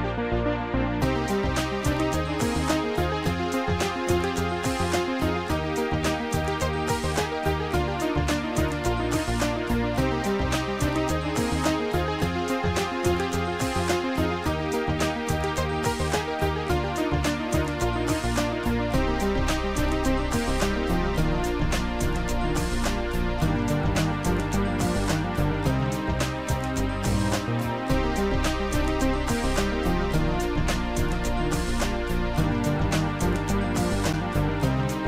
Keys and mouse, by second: 0.4 ctrl+click, 1.2 shift+click, 1.2 right click, 3.6 right click, 4.6 shift+click, 5.0 shift+click, 6.3 right click, 8.1 right click, 10.9 click, 10.9 right click, 14.2 click, 14.8 click, 17.1 click, 18.6 click, 19.9 click, 20.6 shift+click, 23.2 shift+click, 25.9 Delete, 25.9 shift+click, 28.3 Delete, 28.3 click, 29.3 click, 31.4 Delete, 31.4 click, 32.3 click, 33.5 click.